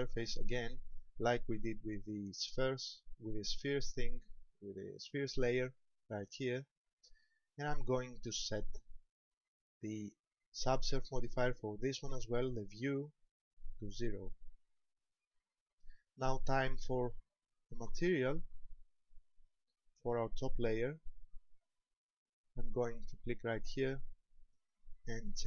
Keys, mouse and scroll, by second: 6.7 click, 13.6 click, 19.4 click, 23.8 click, 24.7 click.